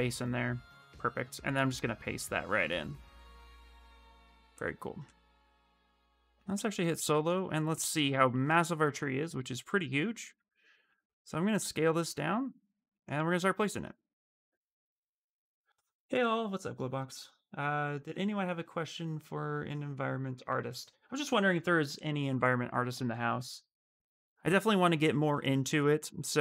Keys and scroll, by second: 9.3 d, 10.0 w.